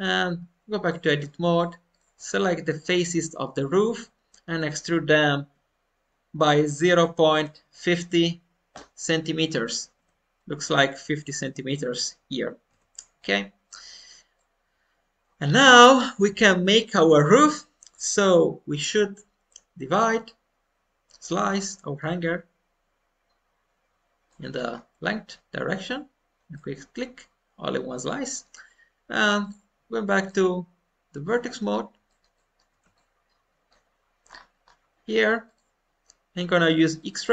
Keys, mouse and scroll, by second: 0.8-2.3 drag, 2.3-3.8 middle drag, 3.9-5.0 middle drag, 5.3 e, 13.1-15.5 middle drag, 16.9 middle click, 17.4-20.0 middle drag, 20.0 click, 21.4-23.1 middle drag, 24.2 middle click, 24.6-25.8 scroll down 1, 25.8 click, 26.5-28.8 middle drag, 29.4 click, 30.2-34.2 middle drag, 32.0 alt+scroll up 1, 34.2-34.6 scroll up 2, 35.4 click, 35.4 scroll up 1, 36.8 click.